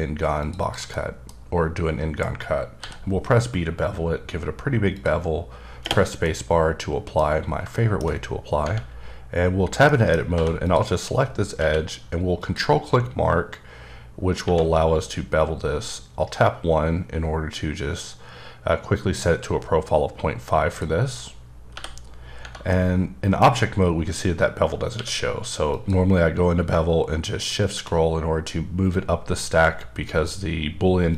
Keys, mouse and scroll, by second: 0.5 double click, 0.6 click, 0.9 middle click, 2.8 b, 3.5-3.9 scroll up 2, 4.9 click, 6.2 middle click, 7.9-8.6 shift+scroll down 2, 9.8 middle click, 10.3 2, 10.6 click, 11.1-11.5 scroll up 1, 11.5 q, 12.4 ctrl+click, 13.7-14.4 scroll up 6, 14.4 1, 20.7 click, 21.7 t, 22.7 middle click, 24.9 q, 25.7 click, 27.4-28.7 shift+scroll up 4.